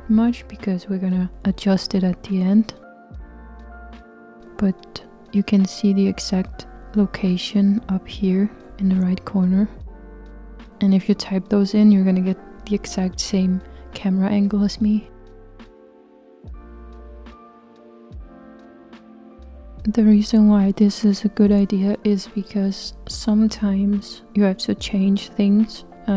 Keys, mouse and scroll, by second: 3.5 g, 8.7 click, 10.1 click, 11.9 g, 18.6-26.1 middle drag.